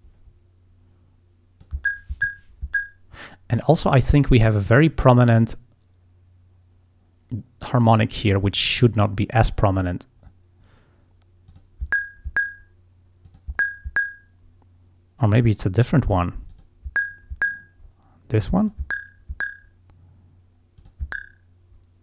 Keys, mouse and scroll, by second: 0.3-1.9 drag, 4.1 click, 8.7 click, 9.1 click, 11.6 click, 13.3 click, 16.6 click, 18.7 click, 20.9 click.